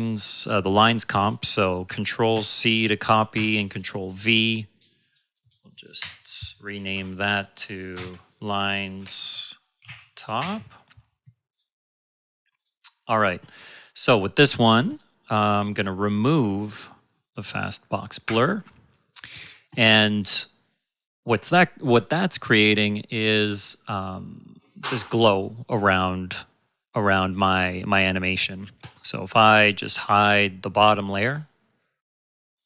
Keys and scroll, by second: 2.3 ctrl+c, 3.3 ctrl+v, 5.9 Return, 7.9 space, 8.9-10.3 typing.